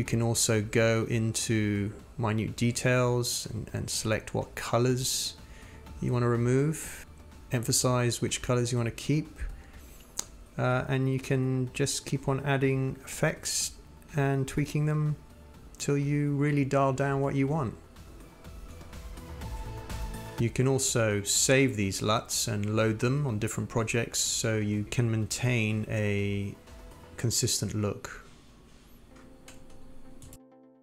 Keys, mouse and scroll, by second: 2.8-3.2 drag, 7.6-9.9 drag, 10.3-12.6 drag, 13.4 click, 14.0 click, 15.6 click, 17.7 scroll down 1, 18.4-24.9 drag, 26.3 click, 27.9 click, 28.0 click, 28.1 click, 30.3 click.